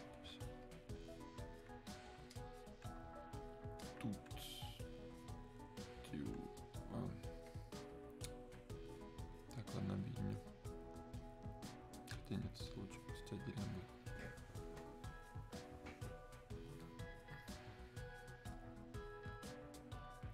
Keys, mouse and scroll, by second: 0.7 click, 2.3-3.8 drag, 3.8 alt+click, 7.9 click, 12.8 click, 15.4 click, 18.6 click.